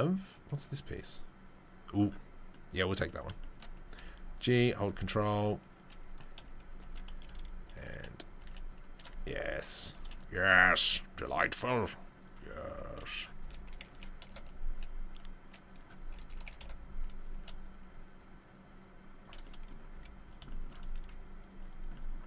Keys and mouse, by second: 0.2-0.9 drag, 0.9-6.8 middle drag, 3.9 g, 4.9 s, 6.4 KP_3, 6.8 ctrl+click, 7.2 ctrl+KP_1, 7.7-11.5 middle drag, 8.4 g, 9.1 s, 9.9 g, 11.5 click, 12.3-21.6 middle drag, 12.6 s, 13.4 r, 14.7 g, 16.0 r, 17.3 g, 19.9 z, 21.0 z, 21.6 click, 21.7-22.2 middle drag.